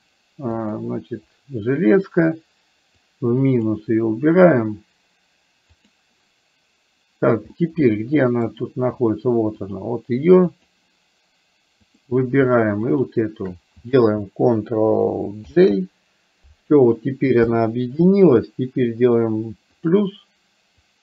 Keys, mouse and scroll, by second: 0.5 click, 3.1 click, 5.9 click, 7.6 middle click, 10.6 click, 12.0 click, 13.0 shift+click, 15.5 ctrl+j, 17.5 KP_1, 20.9 click.